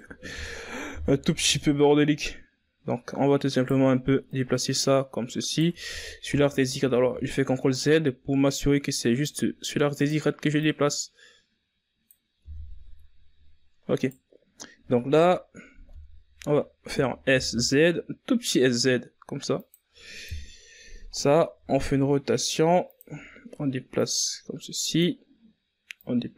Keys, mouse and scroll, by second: 0.4 right click, 0.9 Tab, 1.7 right click, 2.6 ctrl+z, 3.3 o, 4.3 right click, 6.7 right click, 8.3 ctrl+z, 8.8 ctrl+z, 10.2-12.4 drag, 12.4 right click, 13.1-14.9 drag, 14.9 Tab, 15.2-15.9 scroll down 4, 16.1-16.5 scroll up 2, 16.5 right click, 17.6 KP_1, 18.4 Tab, 19.4 s, 22.7 KP_3, 24.0 r.